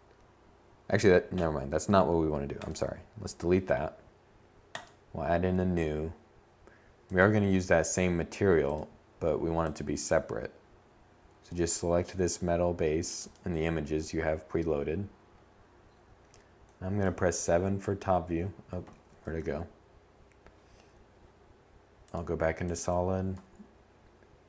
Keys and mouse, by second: 14.6 7, 15.3 8, 15.7 8, 16.9 z, 17.4 z, 21.3 Tab, 22.7 a, 23.1 a.